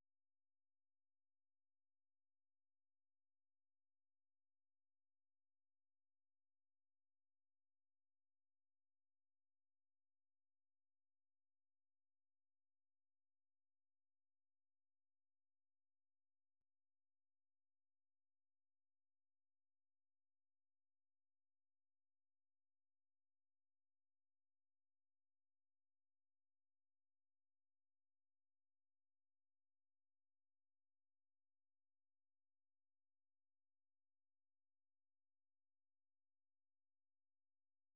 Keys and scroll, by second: 6.2 super+1, 6.7 ctrl+v, 7.1 Return, 9.3 super+2, 12.0-14.0 typing, 26.6 ctrl+c, 28.8 super+1, 29.8 ctrl+v, 30.2 Return, 34.3 Up, 34.5 Up, 34.8 Up, 35.2 Return.